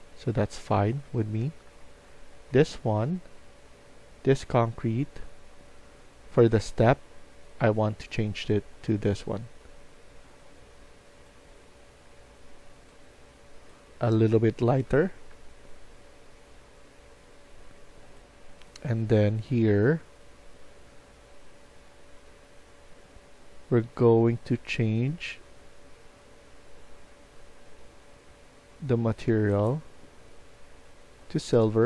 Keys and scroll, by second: 0.0-2.1 typing, 14.1-15.8 typing.